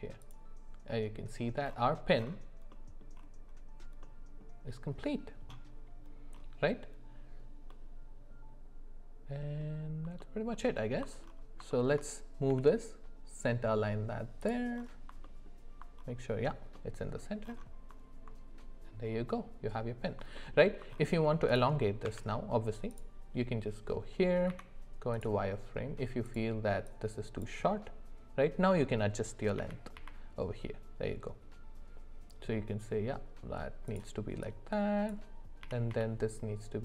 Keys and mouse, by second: 7.7-9.6 middle drag, 10.2 alt+middle click, 10.5 alt+middle click, 11.7 shift+middle drag, 12.5 g, 15.2 middle click, 16.7 middle click, 20.4 alt+middle click, 21.5 click, 22.0 Tab, 24.5 z, 26.9 click, 29.6 g, 34.4 click, 35.6 g.